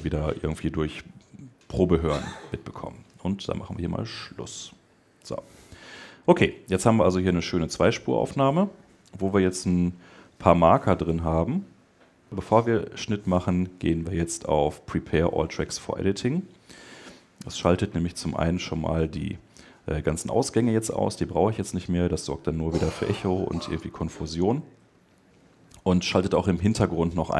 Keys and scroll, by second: 7.4 Escape.